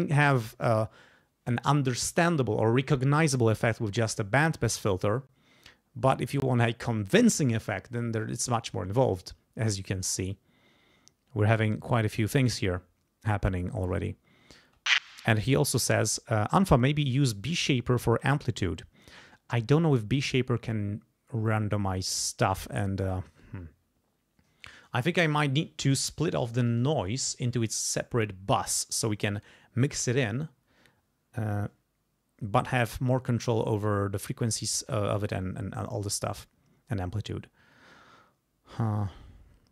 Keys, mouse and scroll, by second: 10.3-12.3 drag, 14.6 space.